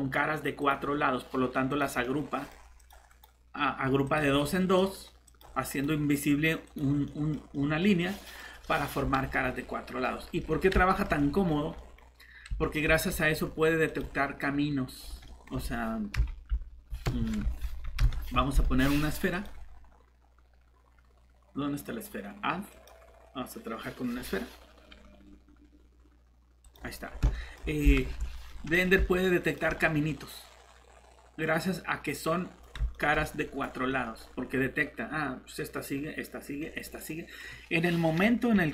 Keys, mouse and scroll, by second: 0.6 click, 2.0 middle click, 2.8 click, 3.1 right click, 4.1 click, 4.4 middle click, 5.3 click, 5.7 right click, 6.6 click, 7.1 middle click, 10.1 scroll down 1, 10.4 middle click, 11.5 scroll up 1, 11.8 middle click, 12.0 scroll up 1, 12.6 middle click, 13.8 click, 15.0 scroll down 1, 15.2 middle click, 15.4 scroll up 1, 16.1 shift+Delete, 16.5 Tab, 16.6 Tab, 17.0 Escape, 17.4 Tab, 17.6 Tab, 18.0 Delete, 19.3 click, 27.0 scroll up 1, 27.3 middle click, 28.0 shift+Tab, 29.4 click, 30.1 middle click, 30.5 typing, 31.5 scroll up 1, 32.2 middle click.